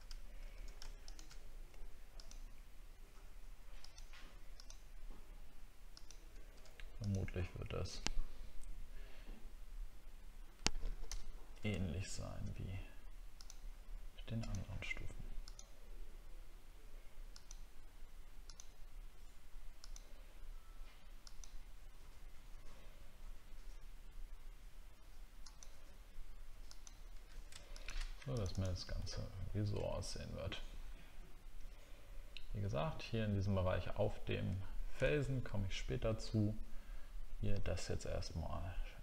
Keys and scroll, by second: 29.1 alt+scroll down 1, 35.1 alt+scroll down 1, 35.8 alt+scroll up 1.